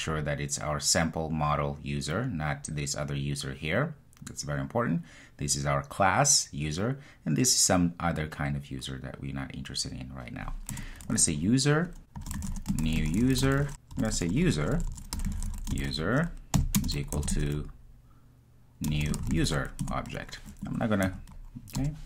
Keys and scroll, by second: 10.8 Return, 19.9 Return.